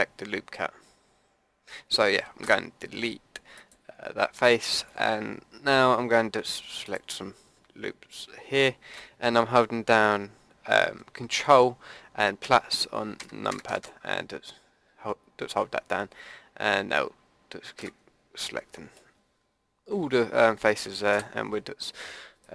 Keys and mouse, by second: 2.4 Delete, 6.9-8.7 drag, 12.4 ctrl+KP_Add, 21.1 Delete.